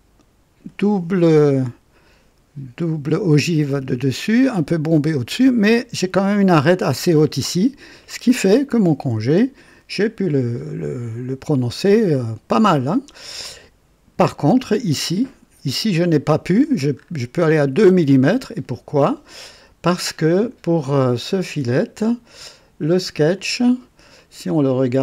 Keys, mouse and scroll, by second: 7.3-8.4 drag, 13.3 space, 15.0 click, 16.9 scroll up 2, 17.6 right click, 20.0-22.3 scroll down 1, 22.3 click, 23.2 click, 24.2-25.0 right drag.